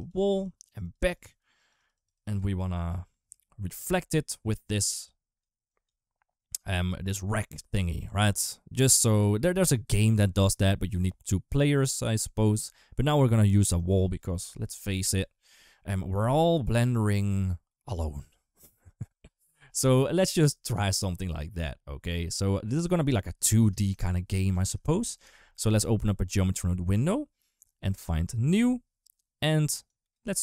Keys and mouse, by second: 0.0-2.2 typing, 0.1 click, 0.4 click, 0.6 click, 0.9 click, 1.4 click, 1.6 click, 1.7 click, 1.9 click, 3.6 d, 4.1 d, 4.2 d, 4.3-6.7 d, 4.3 click, 5.5 click, 13.5 d, 13.6-23.4 right drag, 25.9 click, 26.9 click, 29.7 click.